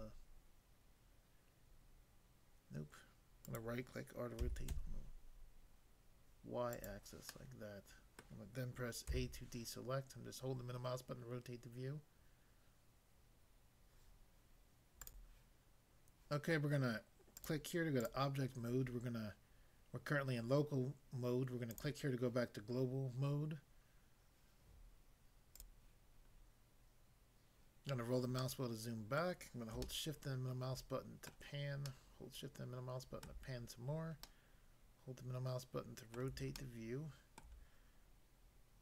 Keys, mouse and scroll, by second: 3.5 right click, 4.4-4.7 typing, 6.7 click, 7.2 middle click, 8.2 middle click, 9.0 a, 15.0 click, 15.2 click, 17.4 click, 18.0 click, 21.7 click, 25.5 click, 25.9 click, 26.3-26.8 scroll down 1, 28.0 scroll down 1, 28.4 middle click, 29.2 middle click, 29.9 shift+middle click, 31.9 shift+middle click, 33.3 shift+middle click, 36.1 middle click, 36.5 shift+middle click.